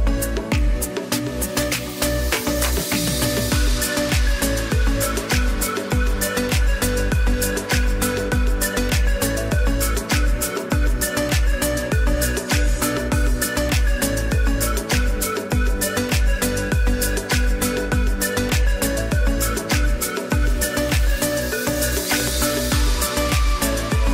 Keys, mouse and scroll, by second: 0.0-1.6 typing, 0.4 click, 1.0 click, 2.1 click, 3.3-7.2 typing, 3.6 click, 5.2 click, 6.1 click, 6.9 click, 9.2 click, 9.3 space, 10.1 click, 11.0 space, 11.1 click, 11.2 space, 12.9 [, 13.0 click, 13.4 [, 13.6 click, 14.2 ], 14.6 click, 17.8-20.2 typing, 18.0 click, 21.4 click, 21.9 z, 22.3 click, 23.3 space, 23.5 click, 24.0 space.